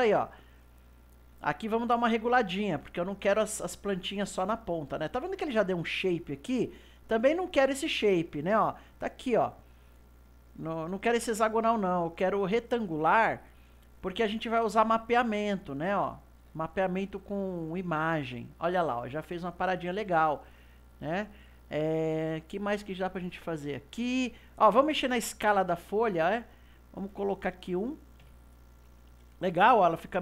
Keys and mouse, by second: 0.3-9.9 middle drag, 11.5-14.5 drag, 14.6-21.3 middle drag, 25.3-28.5 drag, 29.8-30.2 middle drag.